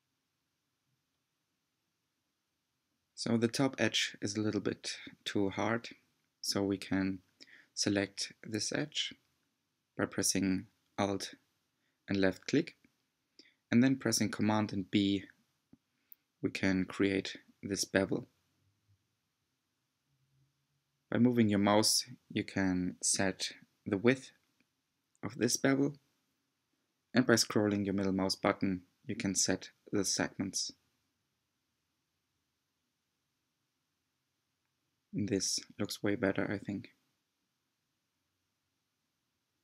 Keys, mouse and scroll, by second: 0.4-0.8 right drag, 0.8 scroll up 4, 1.1-2.6 middle drag, 2.6 Tab, 2.9 middle click, 3.7 2, 4.5 alt+click, 5.3 b, 8.8 Tab, 9.2-10.7 middle drag, 10.7 Tab, 10.9 scroll down 1, 11.0-12.4 middle drag, 12.4 Tab, 12.8 Tab, 12.9 middle click, 13.5 scroll down 2, 13.8 middle click, 14.6 click, 15.1 middle click, 16.3 alt+click, 17.2 b, 19.6 middle click, 20.5 scroll up 2, 20.7 middle click, 21.6 2, 22.1 click, 22.3-23.4 middle drag, 23.4 1, 23.6-23.9 scroll up 2, 23.9 shift+middle click, 24.9 click, 25.9-27.0 shift+drag, 27.0-28.4 middle drag, 28.4 g, 29.4 click, 29.7 g, 32.0 click, 32.9 shift+click, 33.4 g, 34.8-36.3 middle drag, 36.6 Tab, 36.9-38.2 middle drag, 38.2 Tab, 38.5 scroll down 3, 38.9 Tab, 39.3 scroll up 3.